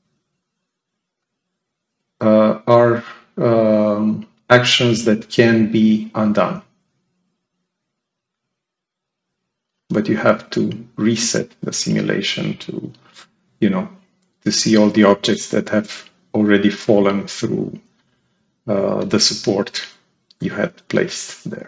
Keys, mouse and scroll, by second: 1.1 click, 2.6 click, 6.1 click, 6.7 click, 8.2 click, 11.4 ctrl+click, 19.8 click.